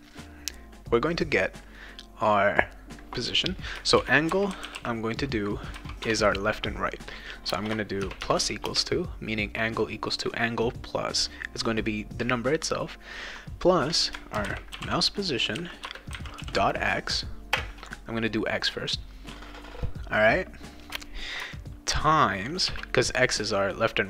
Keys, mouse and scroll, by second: 3.7-5.3 typing, 6.0 Return, 7.5 space, 8.0 shift+=, 8.6 space, 14.1-17.6 typing, 15.8 Return, 22.7 shift+8.